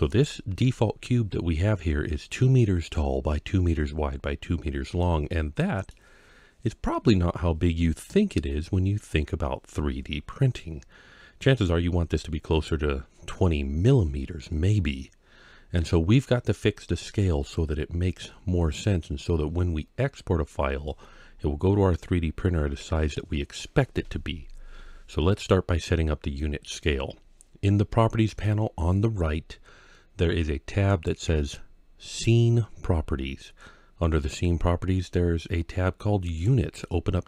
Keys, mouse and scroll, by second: 0.5-2.0 scroll up 1, 4.8 scroll up 1, 4.9-5.7 middle drag, 6.1-7.0 scroll up 3, 7.0-7.7 scroll down 3, 7.7-9.6 middle drag, 17.1-18.0 scroll down 2, 18.0 scroll down 1, 18.9 scroll down 2, 30.7 click, 36.1 click.